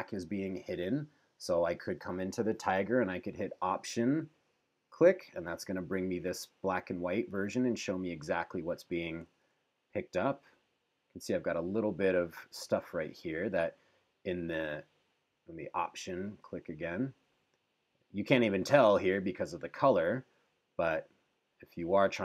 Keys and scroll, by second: 9.5 super+=.